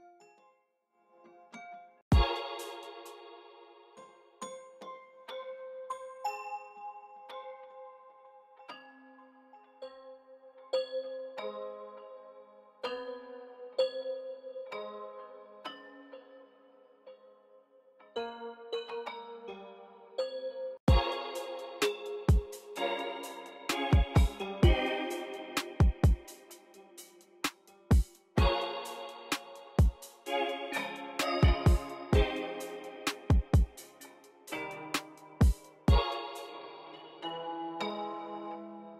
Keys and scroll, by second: 2.0 space, 2.6 space, 2.9 b, 20.7 space, 35.8 space.